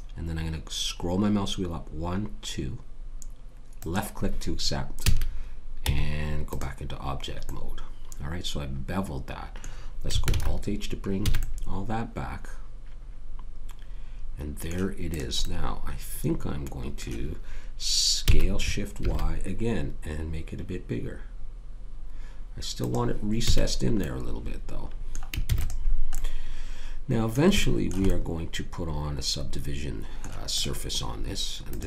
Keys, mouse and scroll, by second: 5.0 a, 5.8 Tab, 10.3 alt+h, 11.3 a, 11.4-12.5 middle drag, 12.6 middle click, 15.1 click, 18.2 s, 23.5 a, 25.4 ctrl+s, 30.6-31.8 drag.